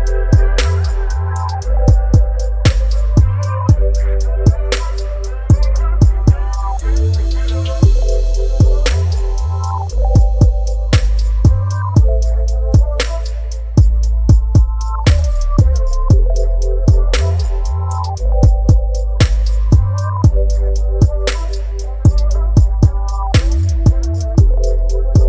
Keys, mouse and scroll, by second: 3.1 ctrl+t, 6.6-18.4 drag, 18.4 Return, 21.1 Return, 21.2 shift+click, 22.7 shift+click.